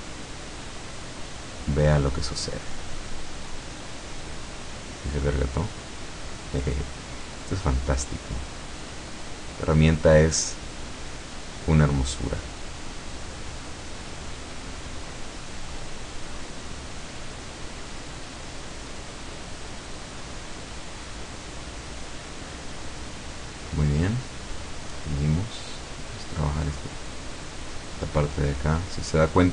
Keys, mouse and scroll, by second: 3.5-5.5 drag, 5.7-7.0 drag, 7.3-8.8 drag, 9.9-11.8 drag, 12.0-13.0 drag, 13.3-14.5 drag, 15.0-16.5 drag, 17.1 click, 18.5 click, 20.0-20.3 scroll down 1, 20.3-23.0 middle drag, 23.2-23.5 scroll up 1, 24.0-25.4 drag, 25.8-27.5 drag, 27.7 click, 28.8-29.5 drag.